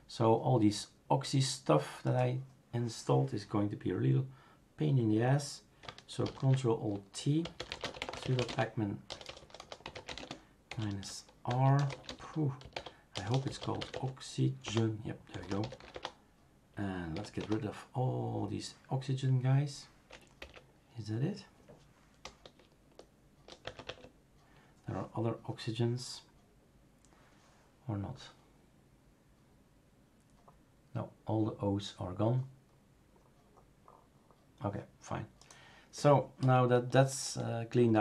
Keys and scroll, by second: 6.2 ctrl+alt+t, 7.2-17.6 typing, 14.6 Return, 20.4 Up, 22.2 BackSpace, 22.9 BackSpace, 23.0-23.5 BackSpace, 23.6 Tab, 23.8 Tab, 36.4 BackSpace, 37.0 BackSpace, 37.2-38.0 BackSpace.